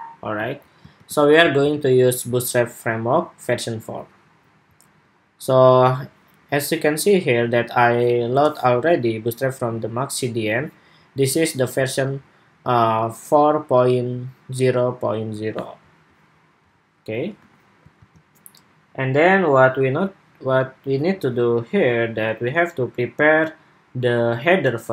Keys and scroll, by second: 0.8 super+w, 17.7 super+s.